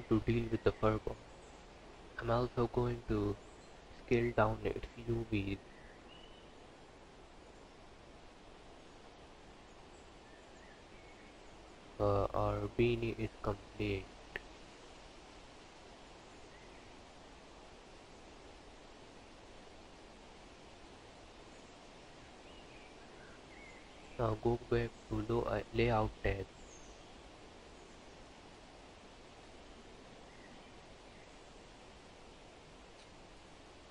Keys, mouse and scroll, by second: 0.8 click, 1.1 l, 3.1 s, 5.4 Tab, 6.0 click, 6.9 click, 8.5-8.9 scroll down 6, 8.9 click, 9.7 click, 15.8-16.2 scroll up 4, 16.2 click, 19.1 click, 21.3-21.8 scroll down 4.